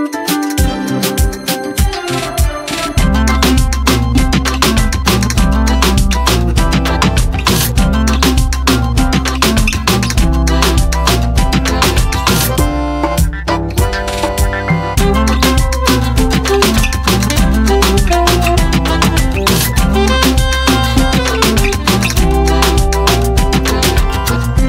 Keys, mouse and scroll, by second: 6.3 scroll up 1, 7.8 click, 8.4 space, 8.4 right click, 9.1 click, 18.1-19.7 drag.